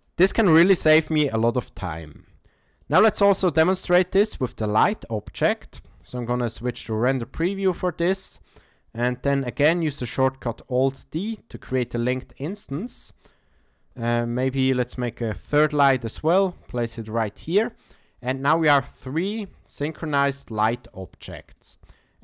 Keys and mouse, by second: 2.8 shift+middle drag, 3.3 middle click, 5.2-5.5 shift+middle drag, 7.5-8.5 shift+middle drag, 9.5 alt+d, 12.7 KP_7, 13.6-14.0 shift+middle drag, 14.5 shift+middle click, 15.4 alt+d, 18.0-18.8 middle drag, 19.1-19.4 shift+middle drag, 19.5-20.0 middle drag, 20.3-20.8 shift+middle drag, 21.0-21.4 ctrl+middle drag, 21.6 shift+middle drag.